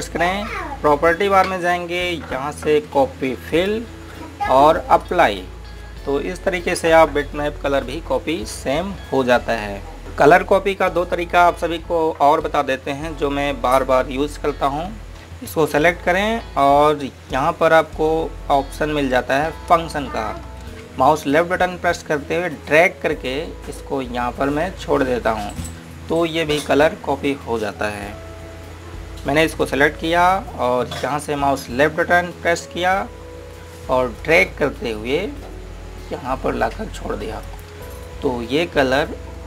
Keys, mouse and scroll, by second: 0.6 g, 4.4 click, 16.5 click, 23.4 click, 30.7 click, 35.1 click.